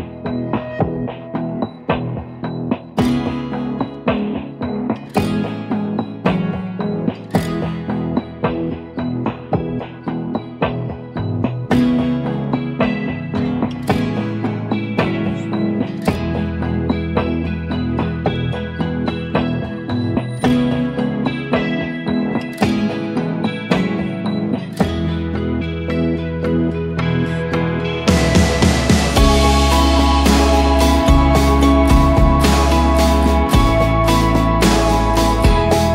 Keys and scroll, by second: 5.0 0, 5.2 Tab, 5.4 0, 5.7 Tab, 5.9 0, 6.0 Tab, 6.4 Return, 11.1-11.7 typing, 12.0 Return, 13.0-18.5 typing, 21.0-22.8 typing, 23.7 ctrl+t, 24.3-25.0 typing, 25.5 Return, 25.8 ctrl+a, 26.8 ctrl+d, 27.1 ctrl+t, 28.7 Return, 32.3 5, 33.0 Return.